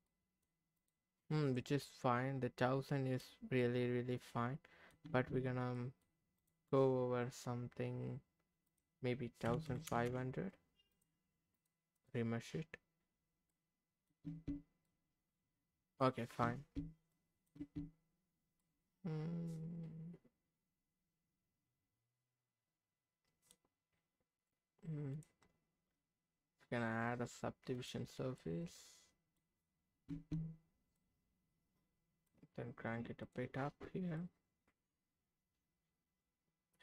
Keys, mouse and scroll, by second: 0.1 middle click, 0.8 click, 1.1 scroll up 1, 1.2-3.3 middle drag, 3.6-5.0 middle drag, 5.1 Tab, 5.7 middle click, 6.3 click, 8.7-11.6 drag, 10.1 KP_0, 11.9-13.3 drag, 13.5 middle click, 14.3 Tab, 14.8-16.1 middle drag, 16.4 Tab, 17.1 middle click, 17.6 Tab, 18.6-23.6 middle drag, 27.8 click, 28.3-29.4 middle drag, 30.1 Tab, 30.9-32.3 middle drag, 33.2 click, 34.2-36.8 middle drag.